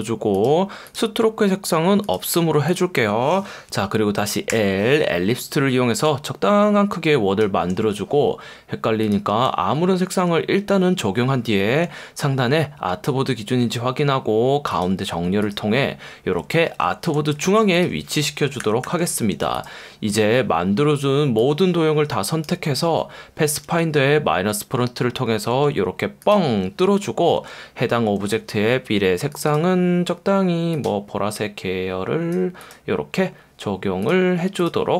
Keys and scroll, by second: 4.5 l, 11.8 F1, 16.7 F1, 17.4 v, 18.6 super+-, 25.9 F1, 27.4 v.